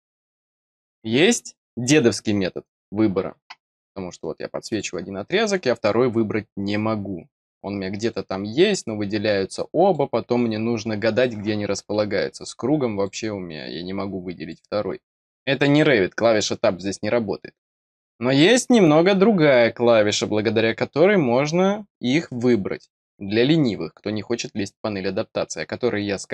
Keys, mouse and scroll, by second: 4.7 click, 5.2 scroll down 1, 8.0 click, 8.5 scroll down 1, 9.8 click, 12.9 click, 14.4 click.